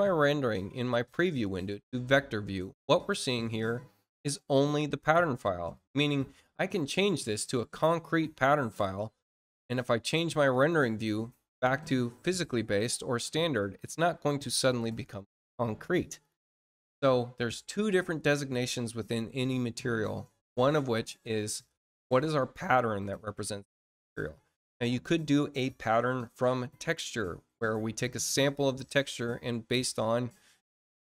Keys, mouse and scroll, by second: 1.4 click, 5.7 click, 7.2 click, 10.4 click, 12.3-13.3 drag, 26.2 click.